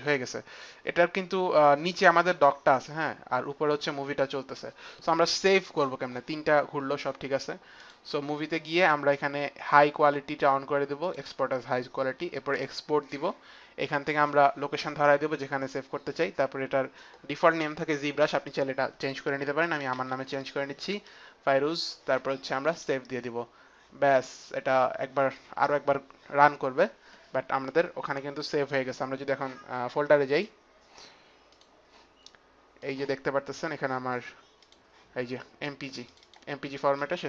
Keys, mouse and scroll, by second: 7.4 click, 10.6 click, 12.2 click, 19.0-20.6 typing, 22.1-22.8 typing, 22.3 click, 32.4 click, 34.3 click, 35.7 click.